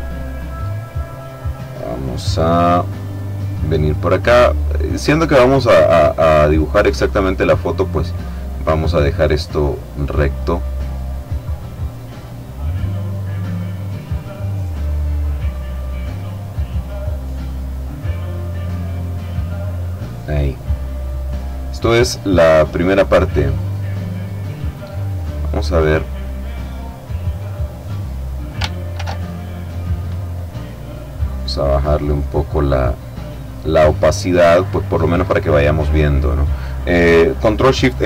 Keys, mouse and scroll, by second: 0.2-3.2 middle drag, 5.0 click, 5.9-7.1 middle drag, 9.7 click, 10.4 click, 11.9 click, 13.6 click, 15.0 click, 16.6 click, 19.0 click, 20.6-21.8 middle drag, 21.8 click, 22.0 middle click, 23.8 click, 25.0 click, 26.5-28.6 middle drag, 29.0 ctrl+shift+f, 31.2 click, 33.8 click.